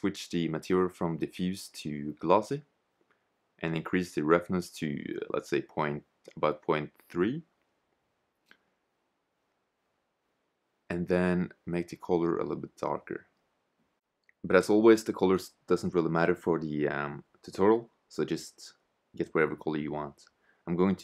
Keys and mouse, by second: 1.5-3.5 middle drag, 5.0 click, 10.7-12.7 drag, 19.8-21.0 drag.